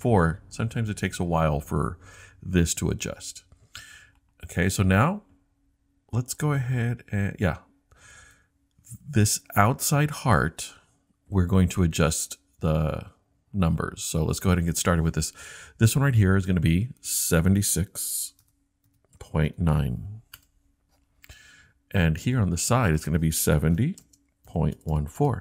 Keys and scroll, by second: 18.2-20.0 typing, 20.4 Return, 23.6-25.4 typing.